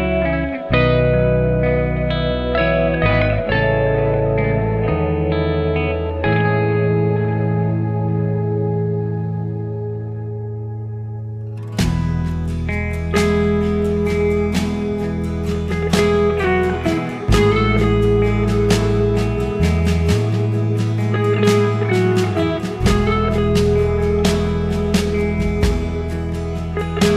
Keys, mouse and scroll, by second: 0.4 click, 1.4 click, 2.5 g, 4.2 click, 4.4 g, 6.0 click, 6.1 g, 6.8 click, 7.1 g, 8.3 click, 10.3 g, 11.4 click, 11.7 g, 13.9 click, 14.3 g, 17.1 Tab, 17.5-17.8 scroll up 5, 17.8-18.4 scroll down 6, 18.4 click, 19.6 click, 20.9 click, 21.2 drag, 21.5 scroll up 5, 21.8-22.4 scroll down 5, 22.4-23.7 right drag, 23.7 click, 23.8-25.0 right drag, 25.0 scroll up 3, 25.3-26.3 scroll down 5, 26.3 click.